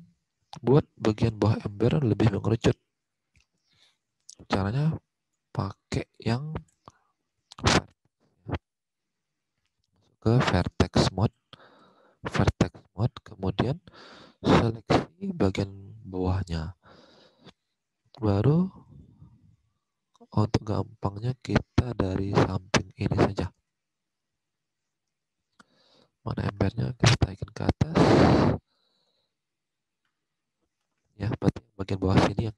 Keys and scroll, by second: 3.8 alt+Tab, 14.4 alt+Tab, 18.7 space.